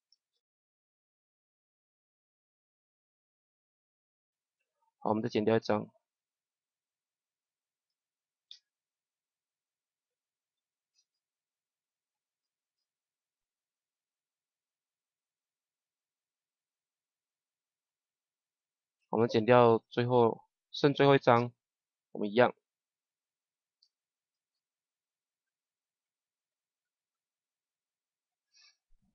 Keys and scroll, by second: 0.2 Right, 1.4 shift+Right, 2.1 Right, 8.4 shift+Left, 10.9 shift+Left, 13.3 Right, 17.2 Right, 23.7 shift+Left, 24.4 Left, 27.5 Right, 27.9 Left.